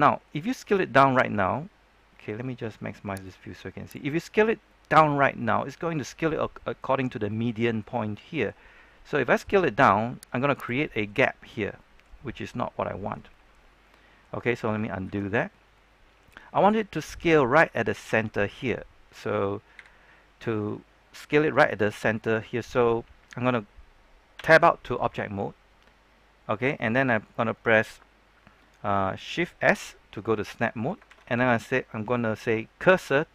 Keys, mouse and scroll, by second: 0.4-0.7 scroll up 1, 1.0-2.1 scroll down 1, 3.2 click, 4.6-9.0 middle drag, 9.2 s, 10.5 click, 10.8 middle click, 12.1 scroll up 1, 12.4 middle click, 15.0 ctrl+z, 15.5 scroll down 1, 15.7-18.1 middle drag, 19.7 KP_7, 24.3 Tab, 24.7-25.1 scroll down 1, 25.1-26.2 scroll up 1, 26.2-27.7 scroll down 1.